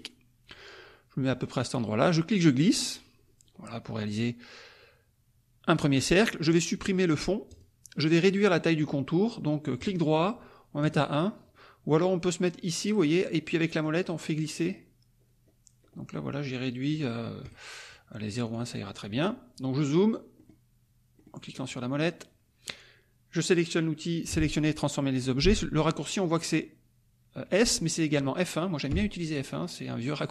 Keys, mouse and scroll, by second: 2.1-6.0 drag, 7.4 click, 9.8 right click, 10.8 click, 13.7-15.0 scroll down 2, 15.0-15.8 scroll down 1, 15.8 scroll up 2, 16.3-16.9 scroll down 2, 17.4 right click, 18.4 click, 20.3 middle click, 20.3 scroll up 2, 21.3 middle click, 21.3-21.8 scroll up 4, 21.5 middle click, 21.8 click, 28.9 F1, 29.9-30.3 drag.